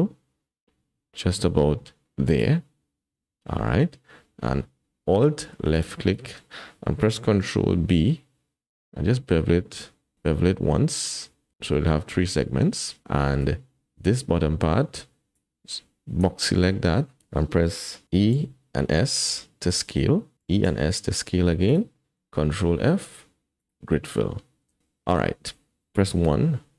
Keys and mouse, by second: 5.7 alt+click, 7.6 ctrl+b, 13.1 shift+click, 15.3 click, 16.7 click, 18.1 e, 22.5 ctrl+f.